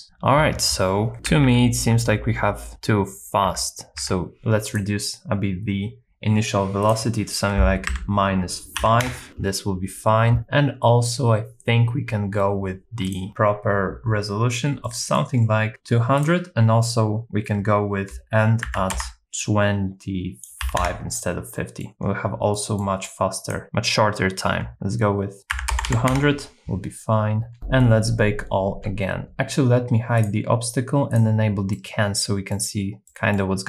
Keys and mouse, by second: 1.1 Left, 1.1 Right, 1.3 Left, 1.6 Left, 2.2 Left, 2.7 Right, 3.5 Left, 4.0 Left, 6.8-9.1 drag, 13.1 click, 14.8 middle click, 16.2-20.9 drag, 21.5 middle click, 22.7 middle click, 23.4-26.4 drag, 25.9 KP_0, 30.2 click, 31.7 middle click, 33.1 middle click.